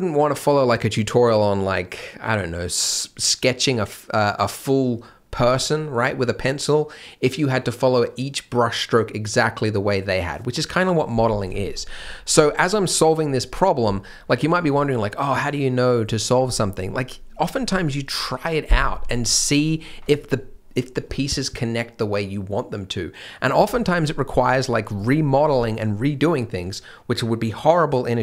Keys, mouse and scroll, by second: 11.3 scroll down 1, 11.5 shift+m, 11.7-14.2 scroll up 1, 14.2-14.5 scroll down 1, 19.2 middle click, 24.0 middle click, 24.6-24.9 scroll down 1, 24.9 click.